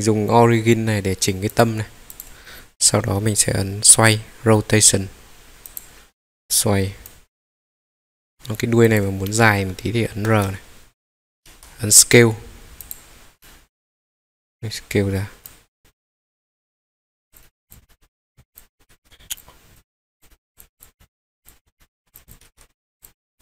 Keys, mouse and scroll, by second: 1.5 click, 2.1 click, 5.6 click, 7.1 click, 8.0 middle click, 8.0 scroll up 2, 8.3-8.8 scroll down 1, 8.8 click, 9.0 scroll down 1, 9.3-10.1 middle drag, 10.3 r, 11.5 Escape, 12.8 click, 13.4-14.0 middle drag, 15.4 click, 15.8 Escape, 15.8-17.2 middle drag, 15.8 s, 17.4 middle click, 17.6 click, 17.7 scroll up 2, 17.8 middle click, 18.5 click, 18.6 scroll down 2, 18.8 r, 19.0 Escape, 19.3 click, 19.7 click, 20.2 middle click, 20.6-21.2 scroll up 3, 20.7 click, 20.9 middle click, 21.4 click, 21.5 scroll down 2, 21.6 scroll up 1, 21.7 middle click, 22.1 click, 22.5 Escape, 22.5 r, 23.0 click, 23.3 click.